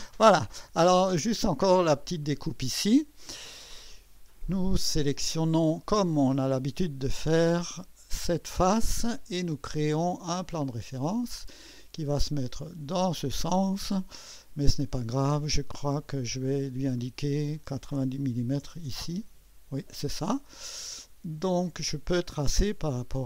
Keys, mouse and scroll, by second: 0.2 click, 0.9 click, 2.7 click, 8.2 click, 10.3 click, 12.1-13.2 drag, 15.9 click, 18.3 9, 18.6 0, 18.8 Return, 20.6-22.1 drag, 23.0 click, 23.0 typing.